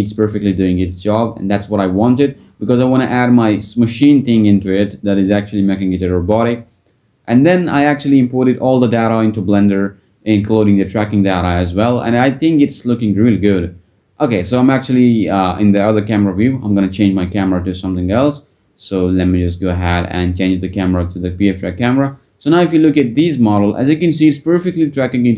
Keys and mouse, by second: 7.1 click, 11.3 click, 23.6 click.